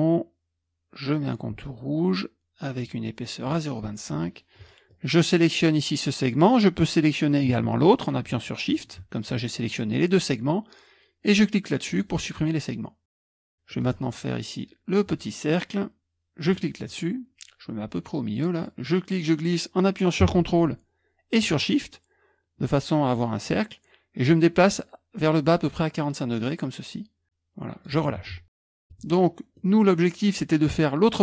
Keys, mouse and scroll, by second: 3.4 click, 4.9-6.7 drag, 6.7-7.8 scroll up 1, 7.8-8.4 shift+scroll up 1, 8.4-13.4 shift+drag, 13.2 KP_Subtract, 13.2 KP_Subtract, 13.4-16.4 scroll down 1, 16.4-18.8 scroll down 1, 19.1-20.4 drag, 28.7 KP_Subtract, 28.7 KP_Subtract, 29.6 click, 29.8-31.2 scroll down 1.